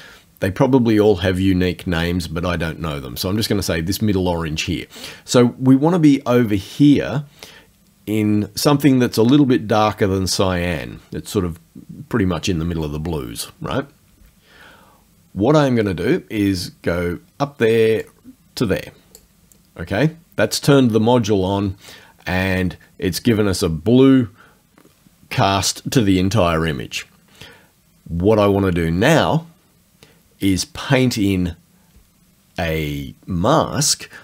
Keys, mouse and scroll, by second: 18.1 click.